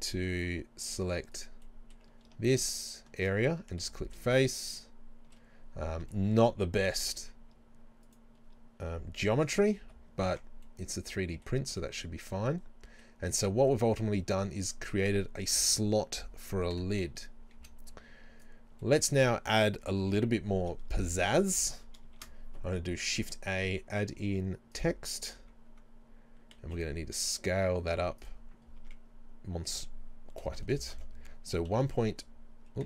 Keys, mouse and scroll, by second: 1.3 scroll down 2, 1.5 right click, 2.7 alt+shift+right click, 3.9 f, 4.4-8.1 shift+middle drag, 5.7 scroll down 2, 8.1 scroll up 1, 8.1 alt+right click, 9.9 f, 10.4 Tab, 10.7-28.3 middle drag, 14.3-14.7 scroll down 2, 16.8 KP_7, 17.6 z, 19.2-20.3 scroll up 2, 22.2 shift+a, 25.2 scroll down 1, 26.6 s, 28.3 click, 28.8 Tab, 30.4 BackSpace, 31.7 KP_1, 31.9 KP_Decimal.